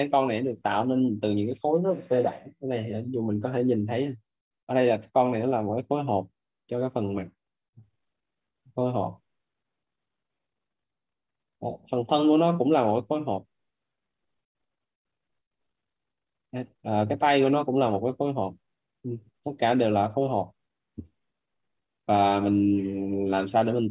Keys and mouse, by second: 3.4 alt+`.